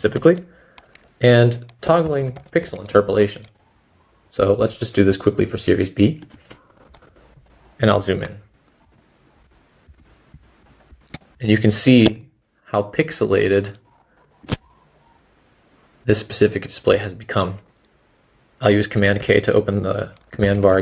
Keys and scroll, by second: 19.2 super+k, 20.1-20.8 typing.